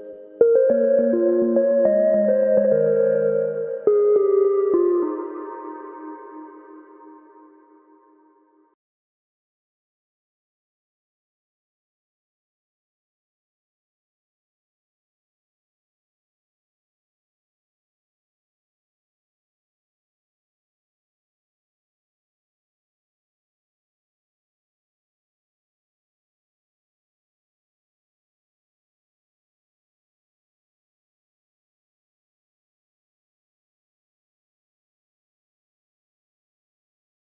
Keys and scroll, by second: 4.5 super+d, 4.8-5.7 typing, 6.9-9.0 typing, 16.5 alt+shift+super+e, 34.7-35.6 typing.